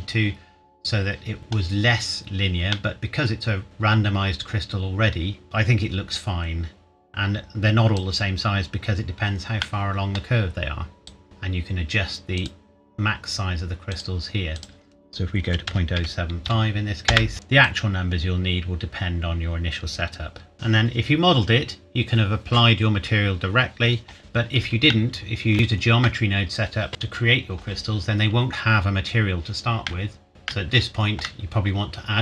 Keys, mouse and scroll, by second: 1.4 scroll up 1, 2.7 middle click, 5.4 click, 9.6 middle click, 11.0 click, 11.2-12.4 scroll up 1, 12.4 click, 15.4 KP_Decimal, 15.6 KP_0, 15.9 KP_7, 16.4 KP_5, 17.1 KP_Enter, 17.6 click, 24.8 shift+Num_Lock, 25.2 shift+middle click, 25.6 scroll up 1, 29.8 shift+middle click, 30.3 click, 30.5 shift+middle click.